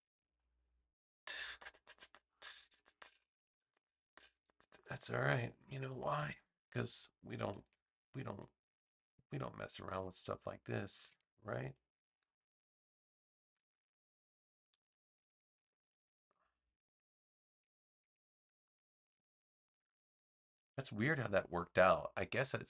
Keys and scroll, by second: 5.8 BackSpace, 7.5 super+z, 9.8 a, 15.5 super+j, 20.5 super+z, 22.1 v.